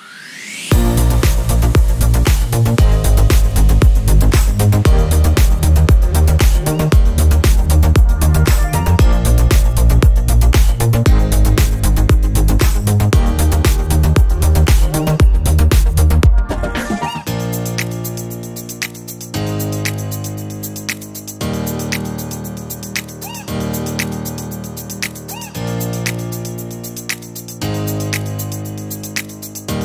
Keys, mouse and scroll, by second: 0.0 click, 0.2 click, 0.4 -, 0.6 click, 0.7 click, 1.4 click, 1.5 click, 1.7 click, 2.0 click, 2.2 click, 2.5 click, 3.2 click, 4.0 drag, 4.4 drag, 4.6 drag, 4.8 click, 4.9 click, 5.2 click, 7.9 Escape, 8.2 drag, 8.3 click, 8.5 drag, 8.9 click, 9.5 click, 10.2 click, 10.6 click, 11.1 click, 11.4 click, 11.5 click, 11.9 drag, 12.2 click, 12.5 click, 13.0 click, 13.5 click, 13.9 click, 14.1 -, 14.2 click, 14.5 drag, 14.6 click, 17.3 click, 17.6 middle click, 17.8 middle click, 18.0 middle click, 18.2 click, 18.3 middle drag, 18.4 click, 18.9 click, 19.2 click, 19.7 click, 19.9 drag, 20.1 click, 20.7 drag, 20.8 drag, 21.1 click, 21.4 click, 22.3 click, 22.4 click, 22.7 click, 23.0 click, 23.3 click, 23.5 click, 23.9 shift+click, 24.1 click, 24.4 click, 25.4 click, 25.7 click, 25.8 click, 25.9 drag, 26.1 drag, 26.7 click, 26.9 click, 27.1 click, 27.4 Delete, 27.6 click, 28.0 click, 28.1 click, 28.5 click, 28.7 click, 28.9 click, 29.1 click, 29.3 click, 29.4 click.